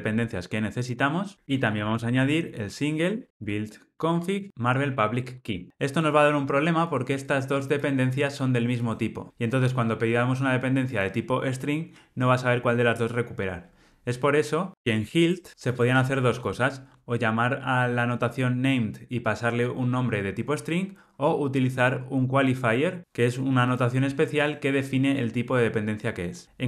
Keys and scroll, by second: 4.1 Tab, 5.4 alt+super+l.